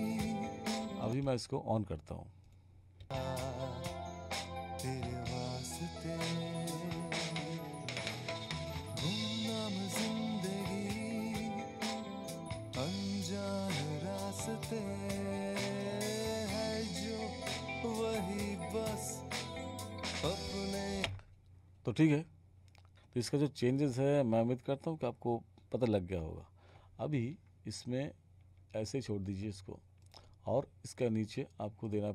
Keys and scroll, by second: 1.1 space, 3.0 space, 21.0 space.